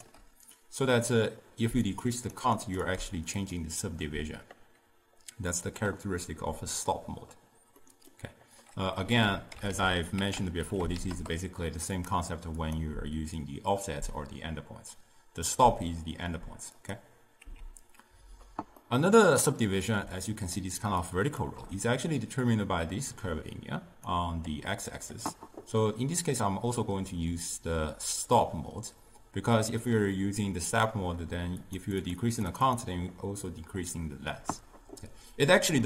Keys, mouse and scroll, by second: 1.9-6.6 drag, 7.9-9.2 middle drag, 9.2 ctrl+a, 12.7-15.8 drag, 17.5 x, 18.9-20.1 middle drag, 20.1 d, 20.4 click, 20.6-21.1 d, 21.1 click, 21.4 d, 22.3 click, 31.7-35.8 drag.